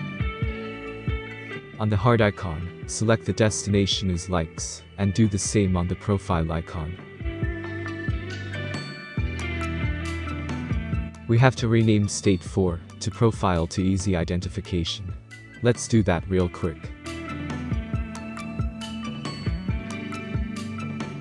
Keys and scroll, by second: 20.0-21.2 typing.